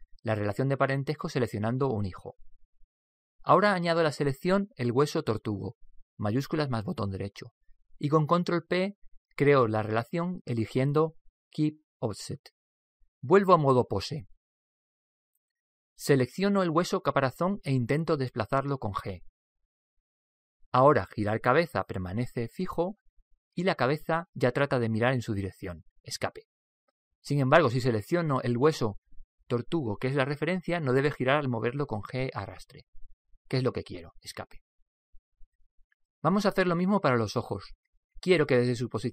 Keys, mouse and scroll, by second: 8.0 right click, 10.2 ctrl+p, 14.9 Tab, 15.6 Tab, 19.2 right click, 20.2 g, 30.1 right click, 32.4 g.